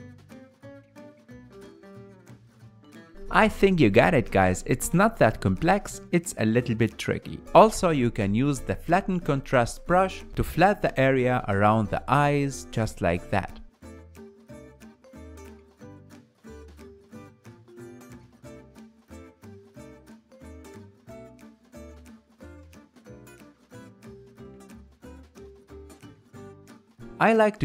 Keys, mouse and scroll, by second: 0.2-1.5 ctrl+drag, 1.5 ctrl+z, 2.1-3.8 ctrl+drag, 3.8-5.3 ctrl+middle drag, 5.3-9.2 ctrl+drag, 9.2-10.9 middle drag, 10.9 click, 11.6 shift+middle click, 12.4-13.5 drag, 13.5 ctrl+z, 14.1-16.4 drag, 16.4-17.6 middle drag, 17.6-20.2 drag, 20.2 middle click, 20.6 click, 21.5 ctrl+middle click, 22.2-24.4 drag, 24.4 middle click, 24.8 click, 25.8 ctrl+middle click, 26.6-27.6 shift+drag.